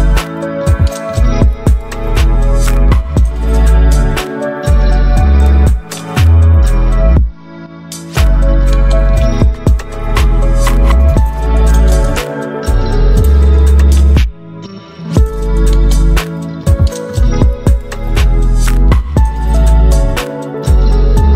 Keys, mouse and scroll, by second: 1.4 click, 2.4 right click, 3.3 click, 6.4-11.8 drag, 11.8-14.5 drag, 14.5-21.3 drag.